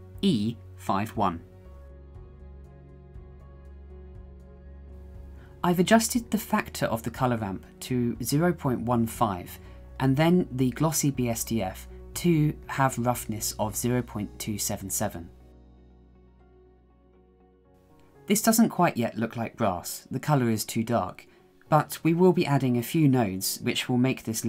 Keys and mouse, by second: 7.6-9.3 drag, 10.6-13.2 drag, 15.8-16.8 drag, 16.9-18.8 drag, 17.9 KP_7, 23.1 shift+click, 23.3 shift+click, 23.5 shift+click.